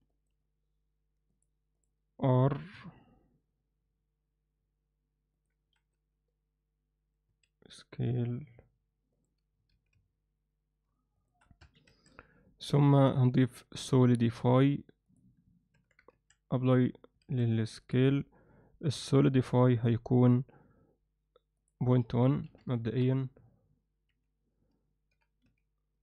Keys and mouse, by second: 1.3-1.8 drag, 2.6 r, 7.3 s, 9.7 r, 11.6 Tab, 11.9 a, 13.3-15.1 drag, 15.7 Tab, 16.1 ctrl+a, 19.7 click, 21.6-23.5 drag, 24.1 z, 25.1 g.